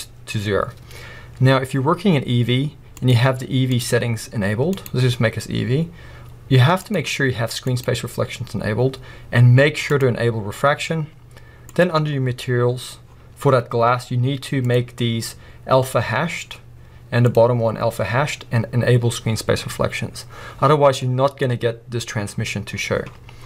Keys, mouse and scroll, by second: 9.9 click.